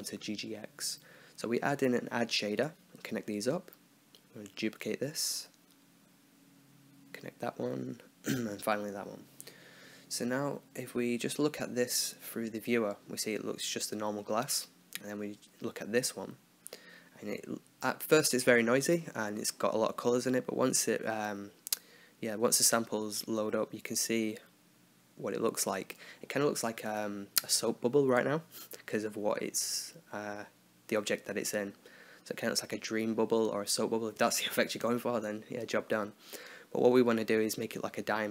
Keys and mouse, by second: 1.8 click, 3.0-4.0 drag, 5.1 shift+d, 7.2-9.5 drag, 9.7-11.1 middle drag, 11.7-12.7 drag, 15.5-16.5 drag, 20.7 middle click, 21.9 middle click, 25.6 shift+a, 26.9 click, 27.6 click, 28.1-29.1 drag, 32.6-33.8 middle drag, 34.1 middle click, 35.1 click, 35.7 click, 37.4 right click, 37.9 x.